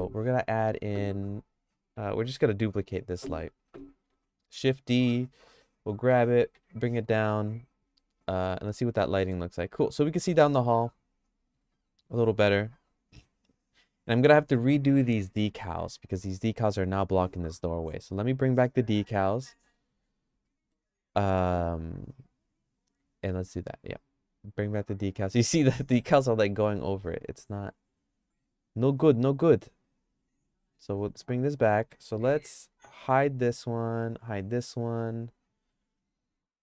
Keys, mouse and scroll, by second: 2.2 click, 4.2 shift+d, 6.1 g, 8.8 click, 9.2 middle click, 9.6-14.4 shift+middle drag, 18.2 click, 19.5 middle click, 20.5 middle click, 24.0 click, 27.5 click, 30.2 click, 31.1 click, 33.0 h, 33.7 click, 34.3 h, 35.0 click.